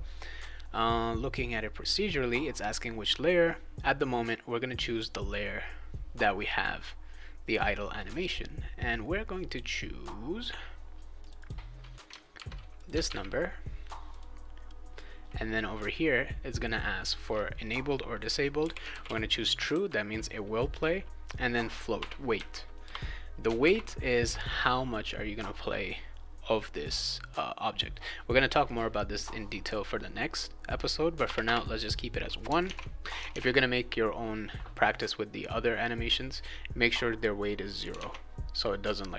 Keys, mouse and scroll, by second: 11.2 click, 11.4 click, 12.3 ctrl+c, 12.7 click, 13.0 ctrl+v, 14.1 click, 18.3-19.5 typing, 21.9 1, 22.8 ;, 23.6 ctrl+s, 31.2 Return, 31.4 Return, 32.6 alt+Tab, 33.3 alt+Tab, 37.9 alt+Tab.